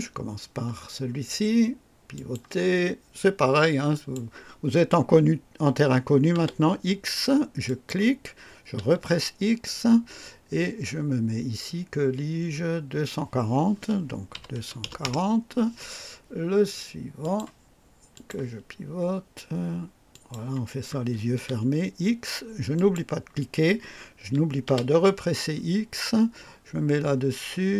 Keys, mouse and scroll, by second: 2.0 click, 3.8 click, 6.3 typing, 7.6 click, 8.7 typing, 14.3-15.0 typing, 17.1 click, 18.0 click, 20.0 click, 21.3 x, 22.7 click, 24.6 x.